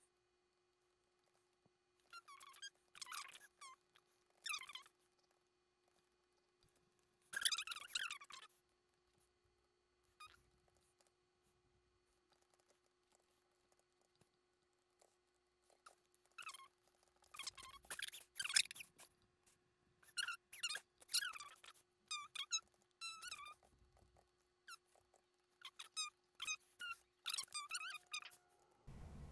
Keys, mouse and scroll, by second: 1.2 middle click, 1.3 shift+middle click, 1.3 shift+middle click, 2.0 shift+middle click, 2.2 shift+middle click, 2.9 shift+middle click, 3.0 middle click, 3.3 middle click, 3.3 shift+middle click, 3.4 shift+middle click, 3.5 middle click, 4.1 double click, 4.2 middle click, 4.3 shift+middle click, 4.3 shift+middle click, 4.4 middle click, 4.5 scroll down 2, 4.5 middle click, 4.8 shift+middle click, 4.8 scroll up 1, 4.9 middle click, 5.0 scroll down 2, 5.0 middle click, 5.1 scroll up 1, 5.2 scroll down 1, 5.3 shift+middle click, 5.9 shift+middle click, 5.9 shift+middle click, 6.1 scroll up 1, 6.2 middle click, 6.3 scroll down 1, 6.4 scroll up 1, 6.4 middle click, 7.6 middle click, 10.5 double click, 10.7 shift+middle click, 11.1 shift+middle click, 12.4 shift+middle click, 12.6 shift+middle click, 12.6 scroll up 1, 12.7 shift+middle click, 13.4 middle click, 13.7 shift+middle click, 15.0 ctrl+z, 15.7 ctrl+z, 15.9 ctrl+z, 15.9 middle click, 16.2 shift+middle click, 16.3 middle click, 16.4 scroll down 1, 16.5 shift+middle click, 16.5 shift+middle click, 16.9 shift+middle click, 16.9 shift+middle click, 17.0 shift+middle click, 17.1 shift+middle click, 17.1 middle click, 17.2 shift+middle click, 17.3 shift+middle click, 17.4 shift+middle click, 17.7 shift+middle click, 17.8 s, 21.5 shift+middle click, 21.7 shift+middle click, 22.2 middle click, 22.6 shift+middle click, 22.6 scroll up 1, 22.7 shift+middle click, 22.8 middle click, 23.3-24.2 typing, 24.4 middle click, 25.0 ctrl+z, 25.2 ctrl+z, 25.3 middle click, 25.8 scroll down 1, 25.9-26.2 scroll up 2, 25.9 middle click, 26.2 scroll down 1, 26.2 middle click, 27.0 shift+middle click, 27.5 shift+middle click, 27.9 shift+middle click, 28.0 shift+middle click, 28.2 shift+middle click, 28.6 shift+middle click, 28.7 shift+middle click.